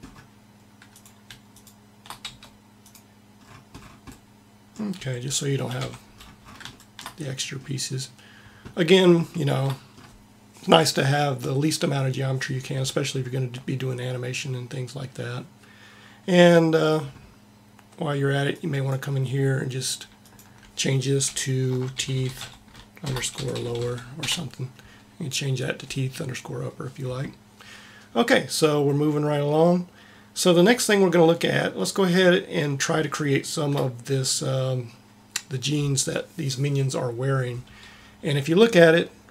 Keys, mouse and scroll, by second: 0.9 right click, 2.2 x, 3.4 middle click, 4.9 a, 5.4 a, 5.8 Tab, 22.0 e, 24.1 e.